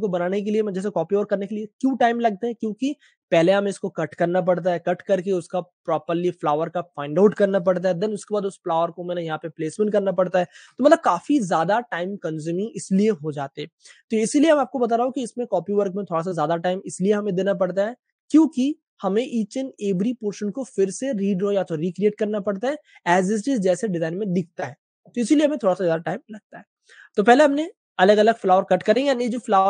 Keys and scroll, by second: 10.7 Page_Down, 10.7 space, 10.7 v, 25.7-28.8 typing.